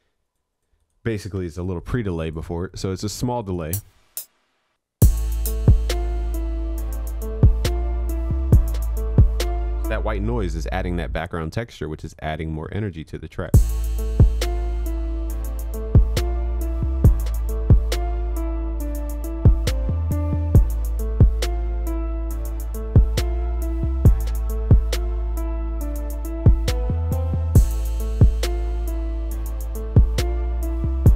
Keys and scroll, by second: 1.5 ctrl+s, 9.7 ctrl+s.